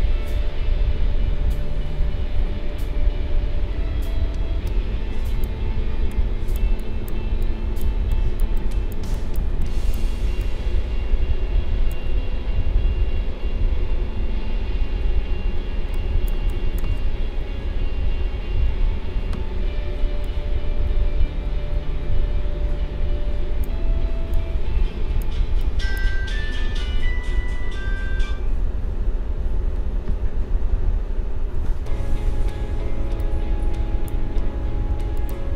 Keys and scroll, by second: 17.7 ctrl+-.